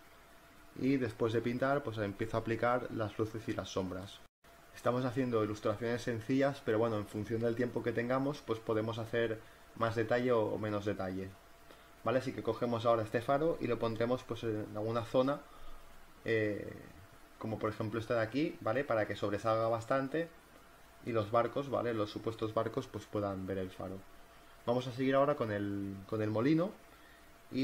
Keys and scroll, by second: 5.2 ], 8.3 v, 9.5 ctrl+alt+z, 9.7 ctrl+alt+z, 11.4 space, 11.5 v, 12.1 ctrl+t, 12.5 Return, 12.6-14.4 typing, 13.4 ctrl+t, 17.4 ctrl+z, 18.2 ctrl+alt+z, 22.9 space, 24.8 space.